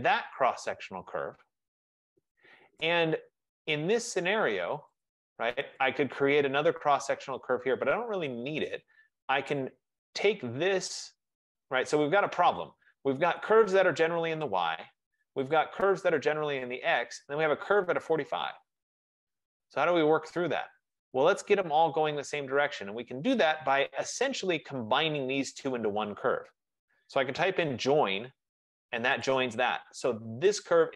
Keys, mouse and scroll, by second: 2.9 right click, 3.4 middle click, 3.5 middle click, 4.2 middle click, 5.1 click, 5.9 click, 9.6 click, 11.5 click, 13.5 click, 15.6 click, 16.3 click, 17.3 click, 18.3 click, 21.1 click, 24.5 click, 25.4 shift+click, 27.2-27.7 typing, 29.4 click, 30.8 click.